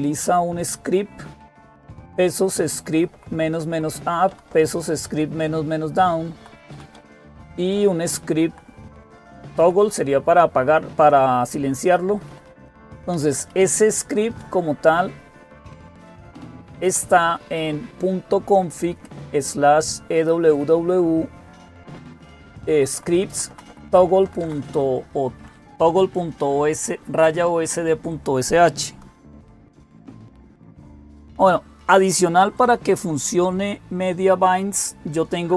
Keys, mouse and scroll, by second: 0.0-0.7 typing, 0.9 Right, 2.2 Right, 2.4 Right, 2.6 Right, 3.1 Up, 3.3 Right, 4.1 Down, 4.3 Down, 6.1 Left, 6.5 Down, 6.7 Down, 7.5 Left, 8.2 Left, 8.3 Left, 9.2 Right, 9.2 Left, 9.4 Right, 9.6 Right, 11.7 Up, 11.9 Up, 12.1 Up, 12.3 Up, 12.9 Up, 13.3 Up, 14.2 Down, 14.2 Left, 14.2 Right, 14.2 Up, 14.2 BackSpace, 14.9-16.1 Left, 16.7 Down, 16.7 Left, 16.7 Right, 16.7 Up, 16.7 …, 16.9 Right, 17.1 Right, 18.6 Right, 19.3 Right, 19.4 Right, 21.3 Right, 22.0 Right, 22.5 Right, 22.7 Right, 23.1 Right, 23.3 Right, 23.5 Right, 23.9 Right, 24.0 Right, 29.8 ctrl+x.